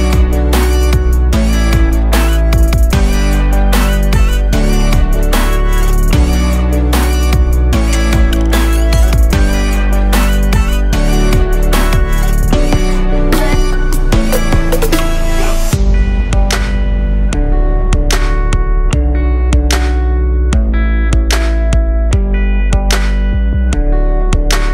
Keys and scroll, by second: 9.1 o.